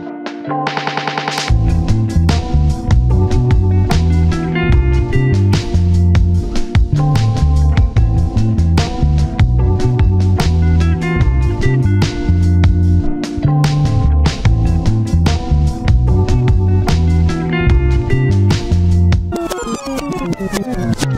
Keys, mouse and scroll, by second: 1.7 scroll down 1, 1.8 middle click, 3.0 scroll down 1, 3.0 middle click, 3.9 typing, 4.3 Return, 5.3 scroll up 1, 5.6-6.4 scroll down 1, 6.5 middle click, 6.7-8.3 scroll up 1, 8.3-10.5 scroll down 1, 10.9-11.6 scroll, 11.6 double click, 11.8 1, 11.9 scroll up 1, 12.1-13.4 scroll down 1, 13.4 scroll up 1, 13.6-15.5 scroll down 1, 16.6 scroll up 1, 16.8-17.4 scroll down 2, 17.1 1, 17.4 scroll up 1, 17.7-18.9 scroll down 1, 18.9-19.3 scroll up 1, 19.3 scroll down 1, 19.6-20.5 scroll up 1.